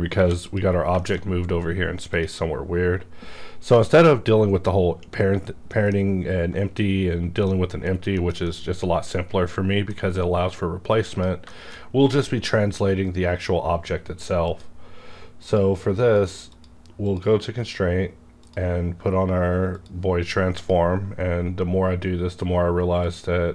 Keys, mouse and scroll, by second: 0.1 g, 0.2 click, 0.5 click, 0.7 scroll down 1, 1.0 shift+middle click, 2.1 click, 3.7 middle click, 3.8 scroll down 1, 5.6 middle click, 7.4 middle click, 8.1 shift+middle click, 8.5-11.4 shift+middle drag, 11.0 click, 11.4 shift+middle click, 14.4 click, 15.4 click, 23.1 click.